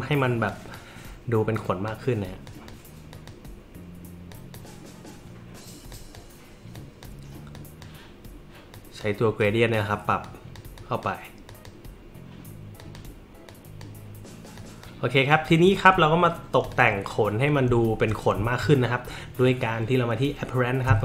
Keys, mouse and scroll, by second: 0.5 click, 1.6 click, 2.5 click, 3.1 click, 4.3 click, 5.9 click, 6.7 drag, 7.5 click, 8.7 click, 9.4-9.7 drag, 10.2 click, 10.8 click, 11.5 click, 12.8 click, 13.5-13.8 drag, 14.6 click, 15.3 click, 16.6 click, 17.9 alt+scroll, 18.5 alt+scroll.